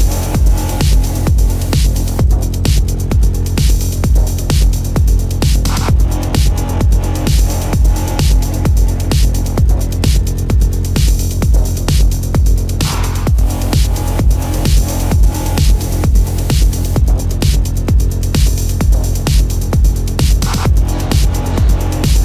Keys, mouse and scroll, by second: 10.7 right click.